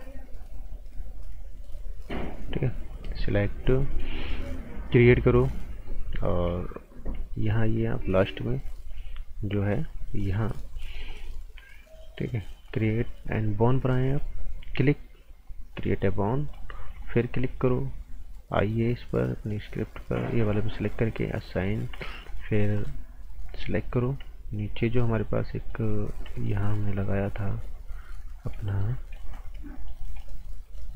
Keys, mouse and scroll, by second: 3.8 scroll down 1, 4.0 right click, 5.2 click, 5.5 right click, 6.4 scroll up 1, 7.3 alt+right click, 9.7 click, 12.6 click, 16.4 scroll down 1, 16.5 right click, 17.0 alt+right click, 17.4 scroll up 1, 20.1 alt+Num_Lock, 20.3 alt+right click, 21.5 click, 22.3 right click, 22.7 right click, 23.7 scroll up 1, 24.6 right click, 25.0-25.3 scroll up 1, 25.6 right click, 26.3 right click, 27.4-28.4 scroll up 1, 28.4-29.0 scroll down 2, 28.6 right click, 29.1 right click, 29.7 alt+right click.